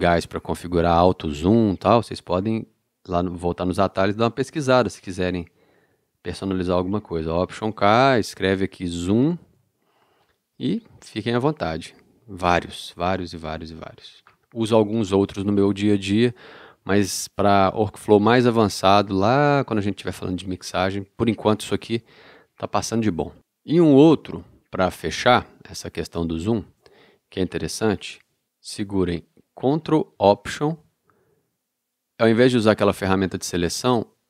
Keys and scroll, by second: 7.6 alt+k, 9.1 z, 9.6 m.